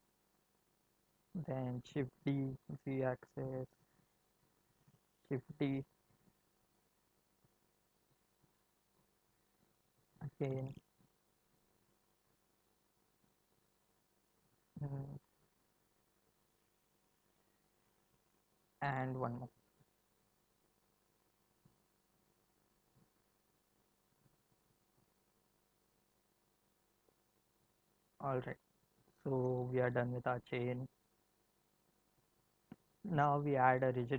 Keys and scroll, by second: 1.7 shift+d, 2.1 z, 5.1 shift+d, 5.7 z, 9.9 shift+d, 10.3 z, 13.8 shift+d, 14.2 z, 19.1 shift+d, 20.1 z.